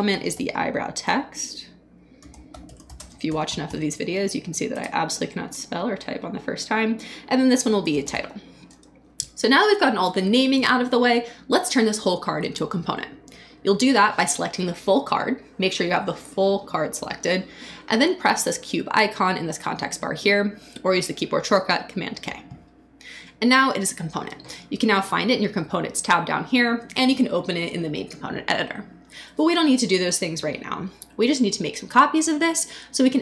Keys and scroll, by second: 0.0-4.4 typing, 4.7 Return, 7.4-8.6 typing, 8.7 Return.